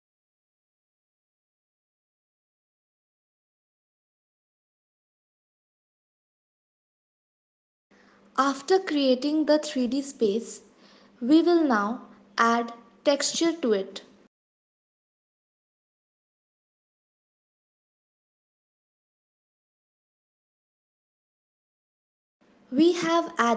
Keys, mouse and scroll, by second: 2.2 e, 2.8 s, 5.2 click, 5.5 shift+click, 5.8 click, 6.1 f, 6.7 click, 8.0 middle click, 8.8-9.2 scroll down 6, 9.5 middle click, 10.6 click, 11.3 shift+middle click, 11.9-12.5 scroll up 7, 12.5 middle click, 13.2 middle click, 14.3-15.6 scroll up 2, 16.4 click, 20.1 click, 21.6 click.